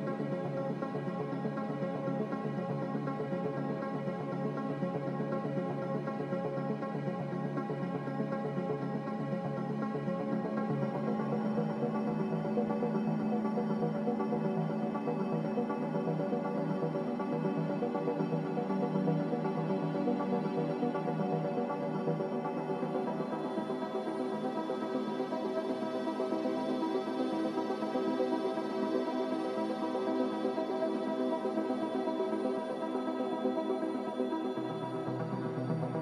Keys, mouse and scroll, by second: 1.7 click, 6.9 click, 26.2 a, 32.1 ctrl+c, 32.2 ctrl+v.